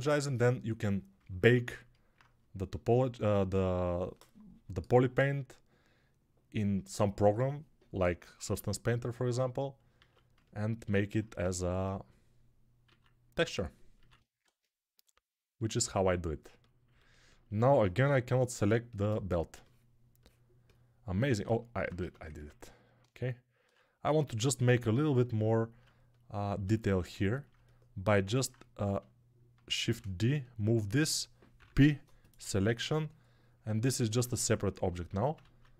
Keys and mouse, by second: 2.0-3.1 drag, 2.0-3.1 middle drag, 2.0-3.1 right drag, 4.9-9.9 drag, 4.9-9.9 middle drag, 4.9-9.9 right drag, 9.9 alt+q, 11.2 Tab, 12.7 alt+q, 14.0-16.6 ctrl+drag, 14.0-16.6 ctrl+middle drag, 14.0-25.6 ctrl+right drag, 14.3 ctrl+Tab, 21.8 Tab, 23.5 3, 29.7 shift+d, 31.4 p, 33.6 ctrl+Tab, 34.9 ctrl+Tab, 35.4 alt+q.